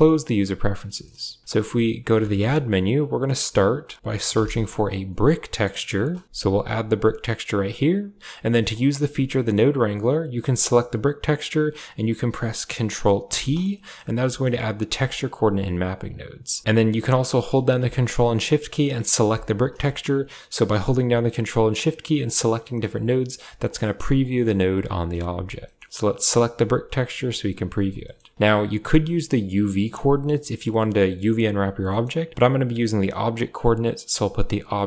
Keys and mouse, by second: 0.8 middle drag, 2.2 shift+a, 5.8 BackSpace, 8.6 click, 9.2 middle click, 10.0 click, 13.2 ctrl+t, 13.6 middle click, 14.1 a, 14.2 drag, 14.8 click, 15.7 click, 16.0 click, 19.2 ctrl+shift+click, 19.7 middle click, 22.1 ctrl+shift+click, 22.8 ctrl+shift+click, 23.5 ctrl+shift+click, 24.1 ctrl+shift+click, 25.5 middle click, 25.9 click, 27.9 middle click, 28.3 click, 29.7-30.2 drag, 31.8 middle click, 33.0-34.1 drag, 34.4 click.